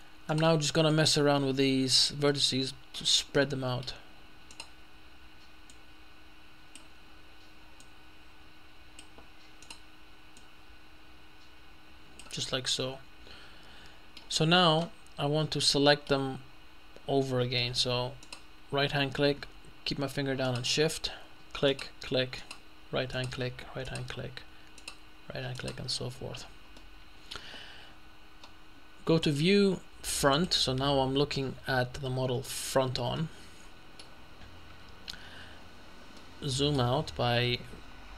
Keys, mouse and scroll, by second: 0.3 right click, 1.0-2.5 drag, 2.4 middle click, 2.6 middle click, 4.6 right click, 5.8-7.3 drag, 7.8-9.6 drag, 10.2 right click, 10.8-12.5 drag, 12.5 scroll up 1, 12.6 middle click, 14.8-16.6 middle drag, 17.3 middle click, 18.3 right click, 20.5 shift+right click, 21.8 right click, 22.5 right click, 23.2 right click, 23.9 right click, 24.8 right click, 26.1-26.8 scroll down 2, 26.8 scroll down 1, 29.3 click, 30.4 click, 33.2-34.4 shift+middle drag, 34.4-36.2 shift+scroll down 1, 36.2-37.3 shift+middle drag, 37.3 shift+scroll up 1.